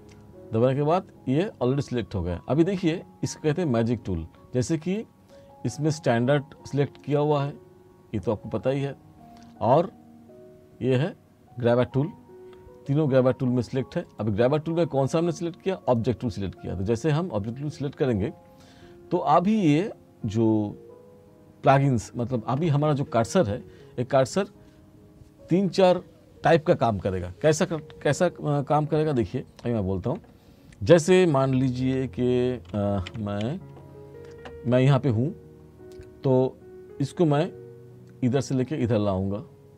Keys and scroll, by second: 29.3 t, 32.0 s.